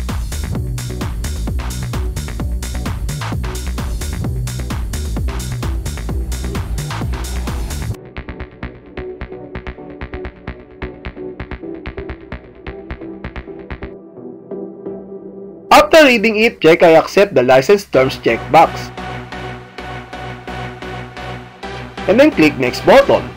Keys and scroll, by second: 0.9 Page_Down, 2.4 Page_Down, 3.0 Page_Down, 6.1 Page_Down, 8.5 Page_Down, 15.1 Page_Down, 18.9 alt+a.